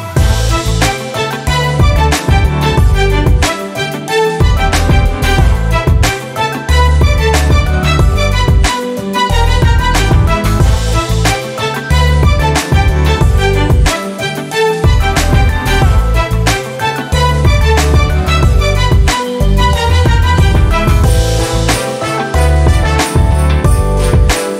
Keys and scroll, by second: 14.3 j, 18.5 j.